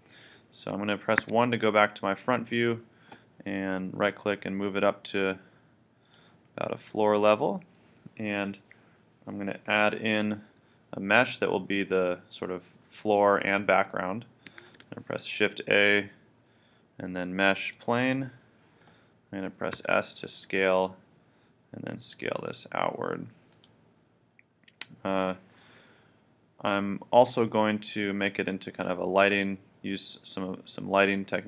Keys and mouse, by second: 1.2 KP_1, 2.5-4.3 drag, 4.8-6.0 drag, 6.8 middle click, 14.6 shift+a, 19.7 s, 23.6-25.6 drag, 29.3 KP_1, 30.9 middle click.